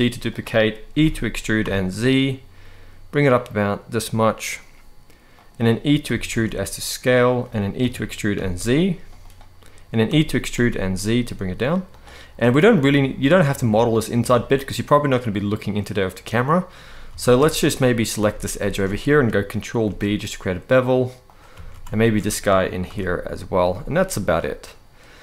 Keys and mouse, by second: 0.7 e, 1.3 z, 5.0 click, 5.7 e, 6.0 s, 6.9 click, 7.5 g, 8.0 z, 9.8 e, 10.2 z, 11.6 click, 12.1 middle click, 14.2-16.4 middle drag, 16.8 alt+a, 17.2 shift+middle click, 17.6 middle click, 18.4 alt+shift+click, 19.6 ctrl+b, 21.0 click, 21.2 alt+a, 21.7 alt+shift+click, 22.6 ctrl+b, 24.1-25.2 middle drag.